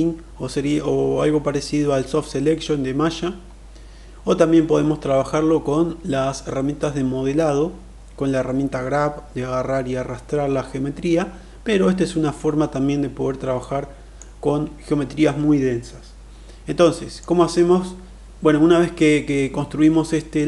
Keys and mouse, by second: 13.5-14.1 middle drag, 16.6-17.2 middle drag.